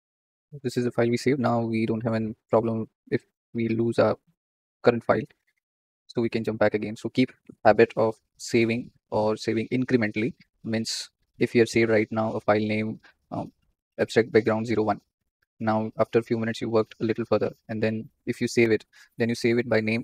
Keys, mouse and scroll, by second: 2.1-20.0 drag.